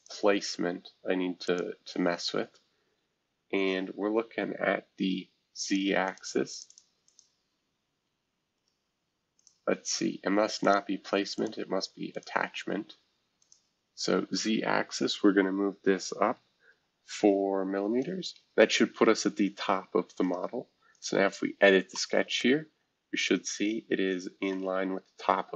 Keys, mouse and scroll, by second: 1.4 click, 2.1 scroll down 1, 5.7 click, 6.0 click, 6.5 click, 7.1-13.5 drag, 16.7 4, 18.0 Return, 20.2 right click, 20.9 click, 21.9-25.5 middle drag.